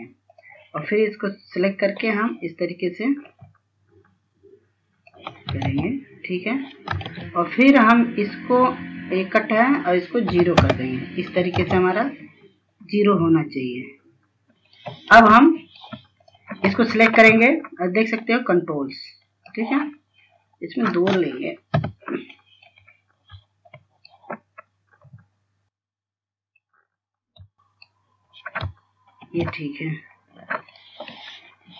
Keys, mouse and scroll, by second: 0.8 click, 1.6 scroll down 1, 2.2 scroll up 1, 3.7-5.7 drag, 6.2 ctrl+space, 6.4 scroll down 1, 6.9 scroll up 1, 7.6 ctrl+space, 10.1 click, 10.8 KP_0, 12.1 ctrl+space, 12.5 click, 12.9-13.5 scroll down 1, 13.5 scroll up 1, 14.1-14.5 scroll up 1, 14.5 scroll down 1, 15.2 click, 15.7 F2, 16.0-22.5 drag, 22.5 KP_2, 23.3-25.3 drag, 25.7 scroll up 1, 26.0 scroll down 1, 27.3 click, 30.0 ctrl+space, 31.0 scroll down 1, 31.5 click.